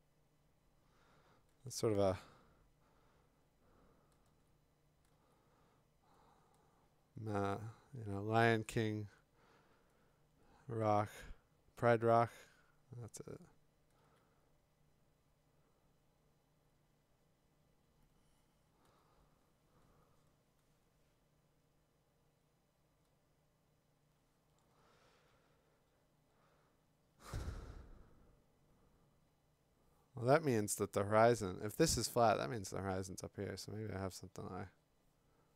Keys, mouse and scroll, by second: 1.6 x, 4.3 x, 5.1 x, 8.4 x, 12.2 x, 14.0 x, 18.9 x, 24.6 x.